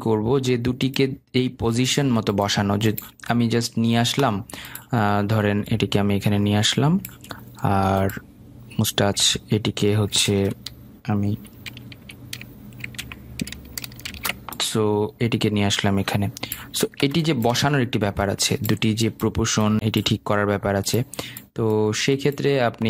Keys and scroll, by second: 10.6 ctrl+z, 14.4 ctrl+shift+z.